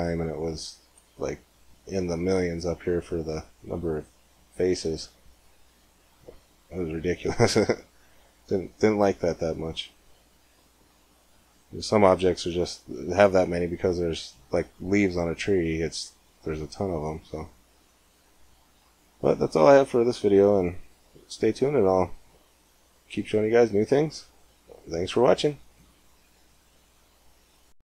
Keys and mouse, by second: 6.8 middle click, 7.2 click, 8.4 g, 8.8-9.8 drag, 11.2 middle click, 13.4 middle click, 16.0-17.4 middle drag, 17.4 g, 18.9-21.4 middle drag, 22.6-24.6 middle drag.